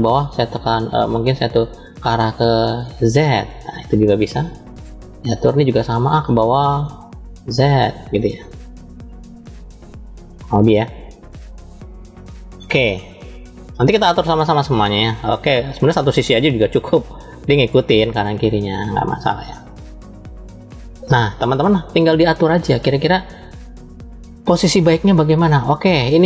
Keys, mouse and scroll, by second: 0.6 click, 2.4 click, 2.6-5.2 drag, 6.0 shift+middle click, 7.1 click, 8.6-12.3 drag, 15.2 click, 15.9 click, 17.2-18.6 drag, 23.5-24.3 scroll up 2, 26.1-26.2 drag.